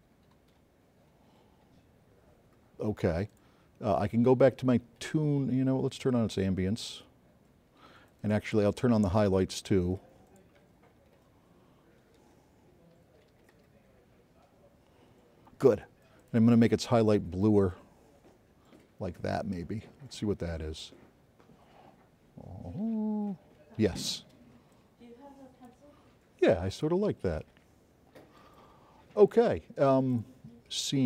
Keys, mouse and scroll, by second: 5.9 click, 8.5 click, 10.9 click, 13.0 click, 19.0 click, 20.4-22.2 drag, 27.5-28.6 drag, 29.5 click.